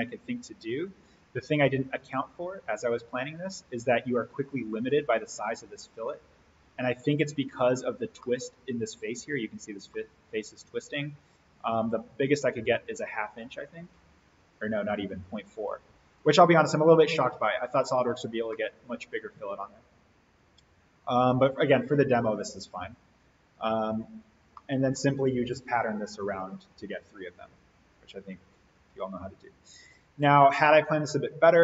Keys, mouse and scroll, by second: 1.5 click, 4.1-5.1 scroll up 1, 6.7 click, 7.4-7.8 scroll down 1, 8.2-10.1 middle drag, 10.5 scroll up 1, 11.7 click, 18.0 scroll up 1, 18.5-21.3 middle drag, 21.3-22.6 scroll down 1, 22.6 click, 24.1-24.5 scroll up 1, 24.5-25.2 middle drag, 28.7-30.3 drag, 30.8-31.5 scroll down 1.